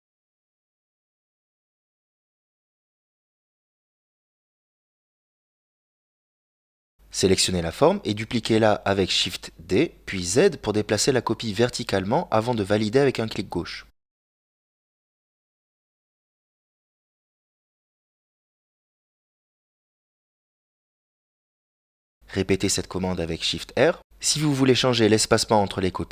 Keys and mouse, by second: 1.0 shift+right click, 1.5-4.0 middle drag, 4.7 x, 7.1 right click, 8.2 ctrl+l, 9.4 middle click, 11.2 click, 12.0 middle click, 13.2 g, 19.0 shift+d, 24.2-26.1 shift+r.